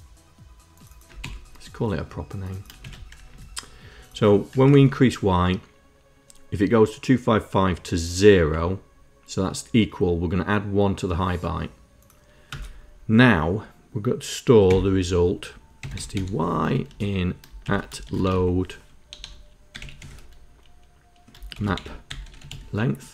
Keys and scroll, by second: 1.1 ctrl+Insert, 2.7 shift+Insert, 3.2 Down, 4.4 Up, 8.3 Down, 14.5 Tab, 15.4-23.1 typing.